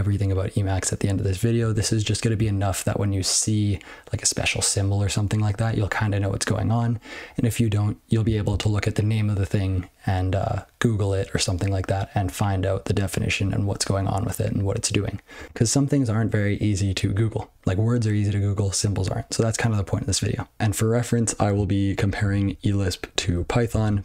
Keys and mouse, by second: 22.1 ctrl+e, 22.5-23.3 ctrl+b, 23.6 ctrl+alt+space.